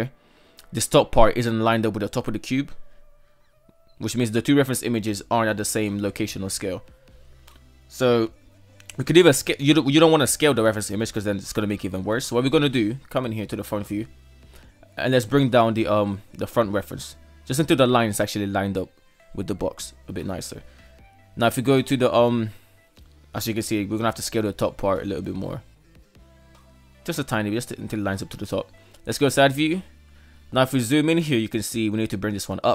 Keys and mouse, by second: 1.3 KP_1, 2.3 shift+middle drag, 3.9 KP_3, 5.3-6.1 right drag, 7.4 shift+middle drag, 8.9 shift+middle click, 9.2 shift+middle click, 10.2 KP_1, 11.5 shift+middle drag, 12.6 shift+middle drag, 13.2-14.3 right drag, 15.7 g, 19.7 KP_3, 20.6 KP_1, 21.5 shift+middle drag, 22.8 shift+middle drag, 23.6-24.5 right drag, 24.5 s, 28.1 KP_3, 29.4 shift+middle click, 29.9 right click, 31.0 shift+middle click, 32.3 g.